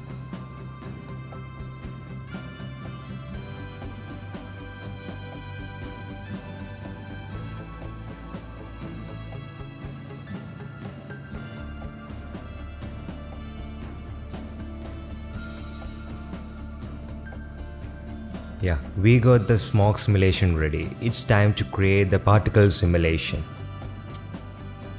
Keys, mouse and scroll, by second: 2.8 space, 3.0 space, 11.8 space, 12.0 z, 13.4 click, 13.8 click, 13.9 click, 14.0 space, 14.7 space, 16.1-19.6 typing, 22.0 click, 22.9 shift+a.